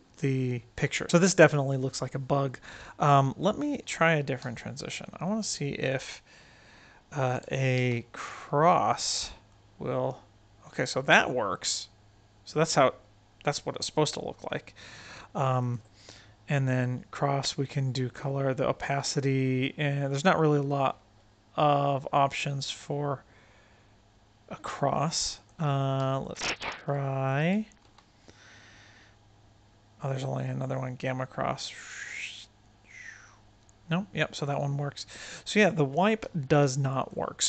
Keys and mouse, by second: 2.4-3.1 right drag, 3.6 click, 4.4 x, 5.2 right click, 5.7 click, 7.0 shift+click, 7.6 shift+a, 9.4-15.0 drag, 22.8-24.6 drag, 25.3 click, 25.9 x, 26.4 click, 27.2 shift+click, 27.7 shift+a, 30.7-34.3 drag, 36.1 x, 36.4-37.1 drag, 37.3 click.